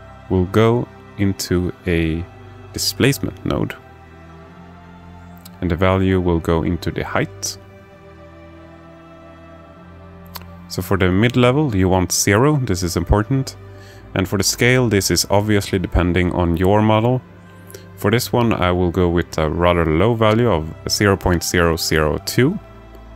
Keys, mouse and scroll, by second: 5.2-7.9 drag, 9.1-10.9 drag, 11.8-17.2 drag, 18.1-21.5 drag, 22.9 click.